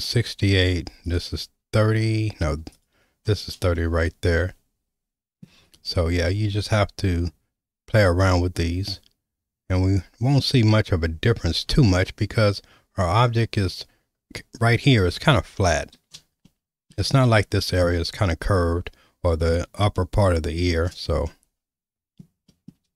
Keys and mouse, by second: 1.0 click, 3.8-5.4 shift+middle drag, 8.3-10.0 drag, 10.9 Tab, 16.5-16.9 shift+middle drag, 21.3-22.2 shift+middle drag, 22.5 shift+middle click.